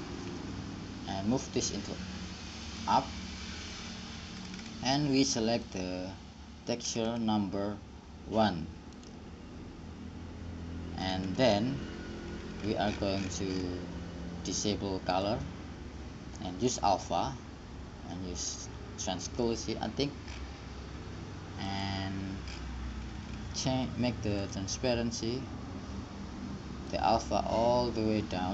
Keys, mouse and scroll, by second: 0.0-1.2 drag, 2.8-4.6 drag, 5.9-9.0 drag, 12.1-15.8 middle drag, 15.8-23.7 drag, 25.0-26.4 drag, 27.2-28.5 drag.